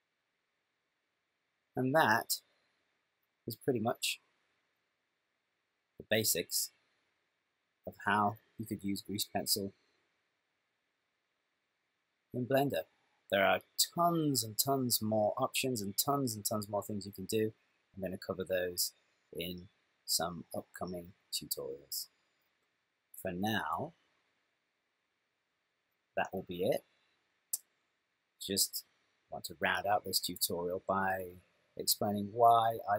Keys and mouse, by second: 24.0 ctrl+middle click, 25.4 ctrl+middle click, 26.7 shift+middle click.